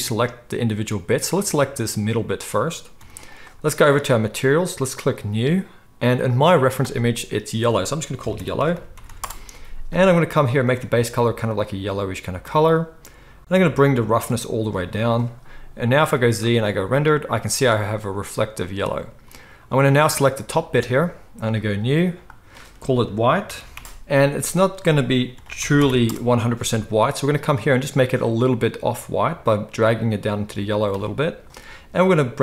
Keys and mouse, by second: 0.9 z, 2.9 g, 4.0 click, 4.2-5.2 middle drag, 5.2-10.7 drag, 8.7 l, 10.7-14.2 middle drag, 14.2-20.1 drag, 15.9 z, 20.1-21.5 middle drag, 21.5-27.4 drag, 23.8 BackSpace, 27.4-32.4 middle drag.